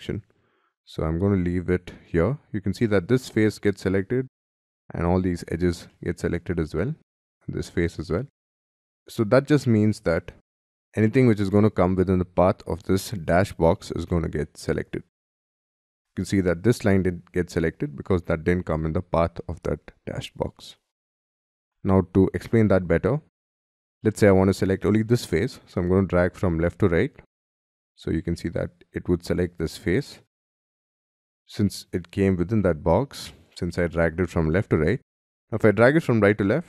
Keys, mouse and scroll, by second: 5.9 middle click, 8.1 middle click, 8.5 middle click, 8.8 middle click, 21.6 middle click, 24.0 middle click, 30.4 middle click, 35.1 middle click.